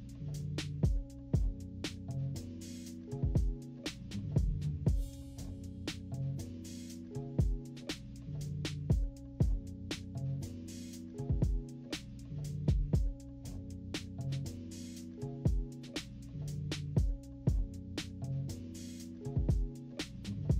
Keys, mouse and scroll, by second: 5.6 click, 5.9 click, 6.9 click, 9.0 -, 9.2 scroll down 2, 9.3 click, 9.4 -, 9.6 =, 9.7 click, 9.8 scroll down 2, 9.8 scroll up 2, 10.2 click, 10.5 click, 11.0 click, 13.3 click, 13.5-15.2 typing, 13.7 scroll down 2, 13.8 click, 14.3 click, 14.6 scroll down 1, 15.0 click, 15.5 click.